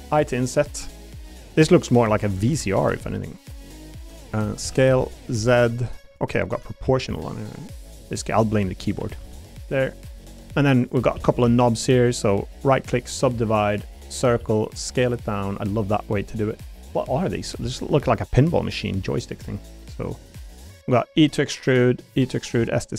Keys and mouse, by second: 0.2 o, 2.9 i, 3.5 click, 4.6 s, 4.9 z, 6.1 click, 6.5 o, 6.8 s, 7.1 z, 7.5 click, 8.2 click, 9.0 a, 9.2 g, 9.8 click, 10.2 click, 11.1 shift+d, 11.4 s, 11.8 click, 12.3 click, 14.1 click, 15.7 click, 15.7 s, 17.6 s, 18.2 click, 18.7 click, 20.1 click, 21.1 e, 21.9 click, 22.1 e, 22.4 click, 22.6 s.